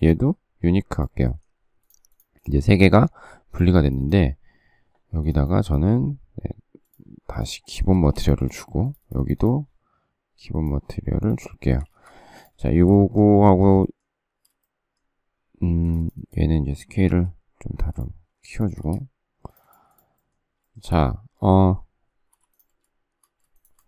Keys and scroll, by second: 7.8 space, 8.0 Escape, 11.6 space, 11.7 Escape, 12.0 Escape, 17.0 s, 18.6 space, 18.7 Escape, 22.3 m.